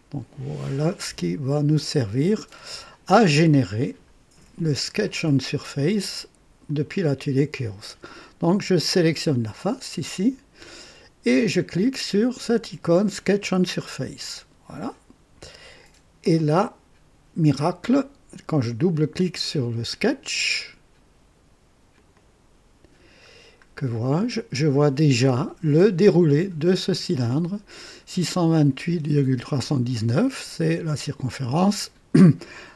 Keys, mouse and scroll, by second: 0.9-3.3 drag, 4.5 click, 6.6 click, 8.9 click, 13.4 click, 16.2 click, 21.9 click, 23.3 scroll down 2, 23.8-24.6 right drag, 24.9-25.3 scroll up 2, 25.5-26.1 right drag, 25.6 click, 32.2 right click.